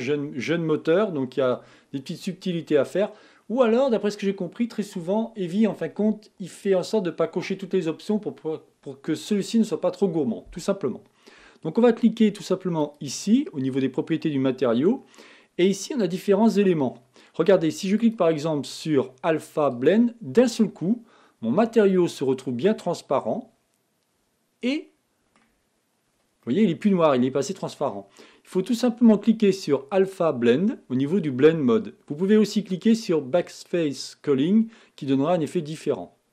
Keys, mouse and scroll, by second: 21.4 middle click, 21.6 middle click, 22.0 middle click, 23.2-27.9 middle drag, 28.1 middle click, 35.3-36.3 middle drag.